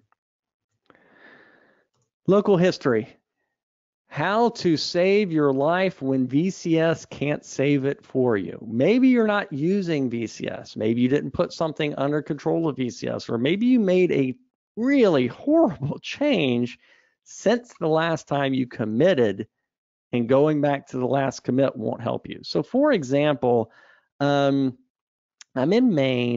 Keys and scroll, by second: 1.2 super+e.